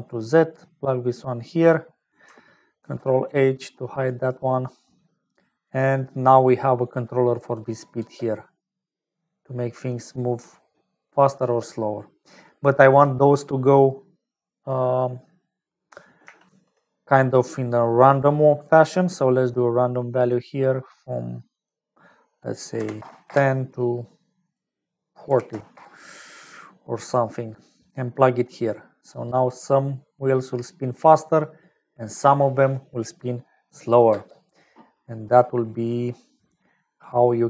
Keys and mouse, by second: 0.3 click, 1.9 click, 2.8 ctrl+h, 3.2 click, 4.7 click, 5.3 click, 6.9 click, 8.4 space, 12.2 space, 12.6 click, 14.0 click, 16.4 shift+a, 21.5-23.9 drag, 24.4-26.2 drag, 27.8 click, 29.4 space, 34.7 space, 36.5 click.